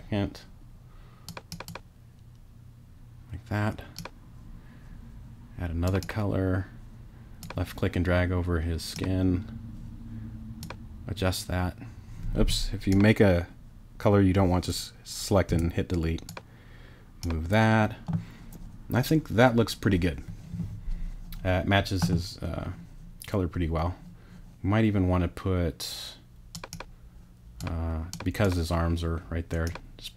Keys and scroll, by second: 15.5 BackSpace.